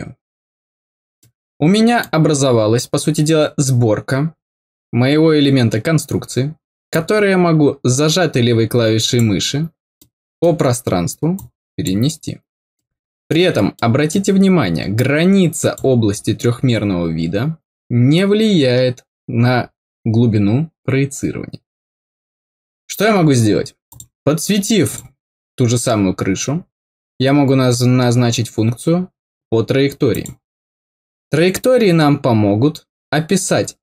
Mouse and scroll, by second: 1.1 middle click, 6.8-9.1 drag, 9.9 middle click, 11.3 click, 12.7 middle click, 13.7 middle click, 14.9 click, 23.8 click, 24.8 click, 30.0 click.